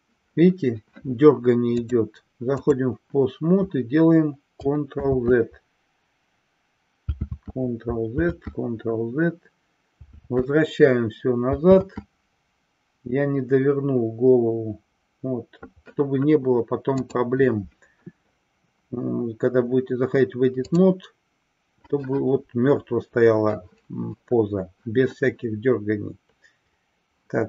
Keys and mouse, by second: 1.7-2.9 drag, 5.7 ctrl+z, 11.0 ctrl+z, 17.1-21.3 drag.